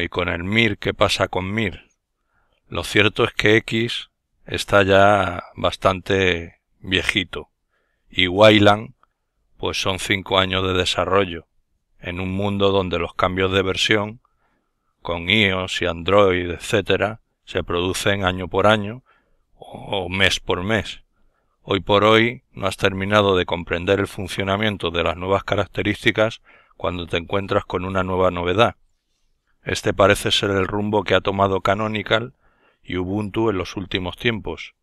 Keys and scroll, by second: 4.2 alt+F10, 6.1 Left, 7.6 Left, 8.4 Left, 9.5 Left, 10.4 Left, 11.4 Left, 12.9 Left, 13.8 Left, 15.5 Left, 16.7 Left, 18.4 Escape.